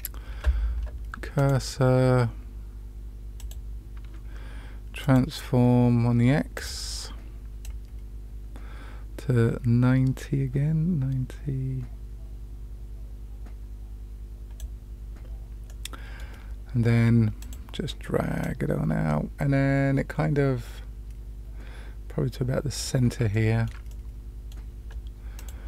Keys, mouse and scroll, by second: 1.3 click, 3.4 click, 5.0 click, 6.5 click, 7.7-14.6 drag, 15.6-16.2 middle drag, 17.4 click, 18.4-22.8 drag, 23.3 shift+middle click, 23.8 middle click, 25.3 click.